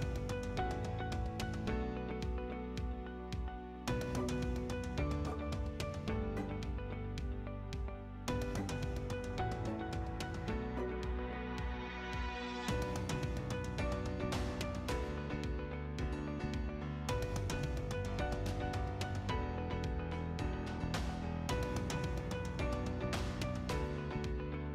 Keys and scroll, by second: 14.6 9, 14.7 Return, 16.9-17.8 typing, 20.0 6, 20.8 Return.